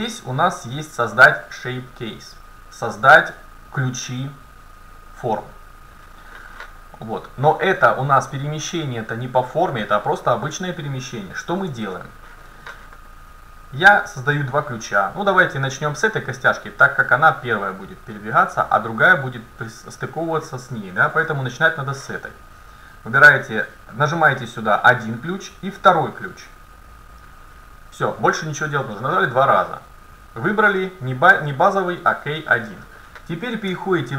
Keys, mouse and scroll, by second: 7.5-9.6 right drag, 8.5-10.3 drag, 11.7 ctrl+z, 16.9-20.4 drag, 21.3 ctrl+z, 23.9-27.6 drag, 30.8-33.2 drag, 33.7 Tab.